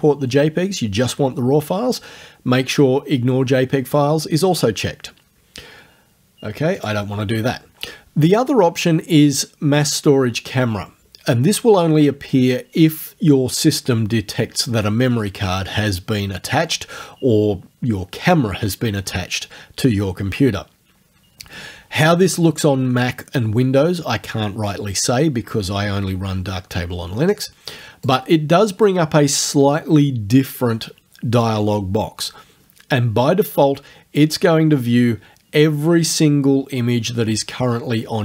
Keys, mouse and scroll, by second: 6.8 click, 28.1 click, 34.7-38.2 drag.